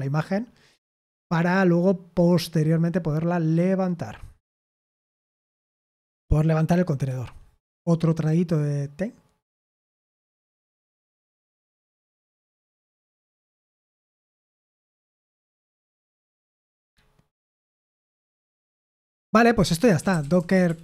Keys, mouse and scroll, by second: 5.0 Return, 6.0 Return, 18.2 Return, 19.7-20.8 typing.